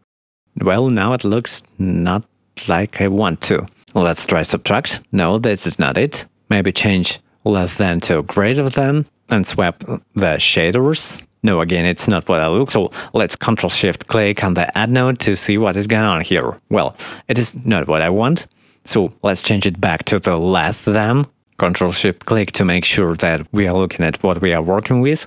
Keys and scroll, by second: 0.2 1, 24.7 shift+a.